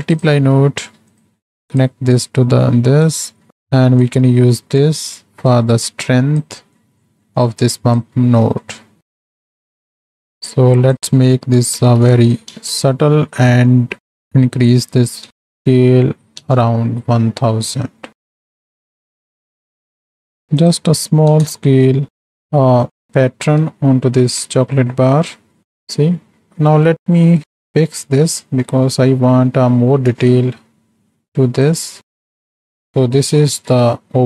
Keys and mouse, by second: 0.2 click, 0.4 shift+d, 1.2 click, 2.2 click, 3.5 click, 4.1 click, 5.6 click, 6.6 middle click, 7.3 middle drag, 8.0-9.3 drag, 11.0-12.7 drag, 14.1-16.4 drag, 15.5 KP_0, 18.5 shift+middle click, 19.1-20.3 shift+drag, 20.7-22.3 drag, 23.9-24.2 shift+middle drag, 25.1 shift+middle click, 26.9 middle click, 28.2 middle click, 30.5 shift+middle drag, 31.6 click, 31.9 click, 32.2 space, 33.1 middle click, 33.4 ctrl+space, 33.9 click.